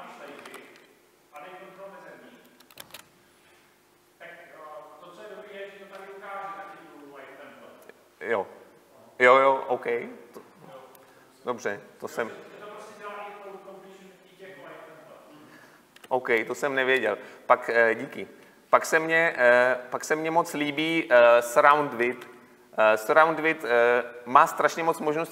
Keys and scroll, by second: 2.8 Delete, 4.7 ctrl+space, 16.0 Escape, 22.1 Delete.